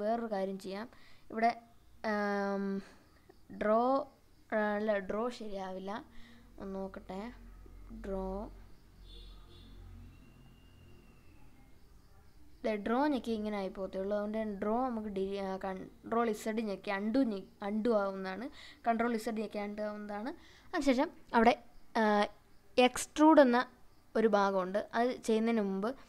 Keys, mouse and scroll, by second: 3.3 click, 5.9 click, 8.5 click, 9.1-9.9 scroll up 2, 10.3 click, 11.1 click, 12.3 g, 13.4 right click, 14.9 ctrl+z, 16.4 ctrl+z, 20.5 click, 22.4 g.